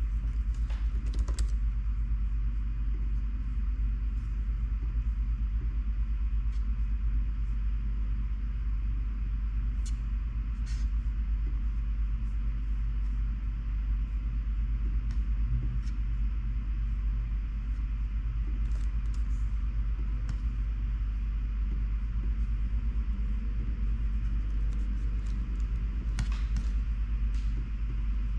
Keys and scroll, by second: 0.8-2.0 typing, 18.9 super+a, 19.2 BackSpace.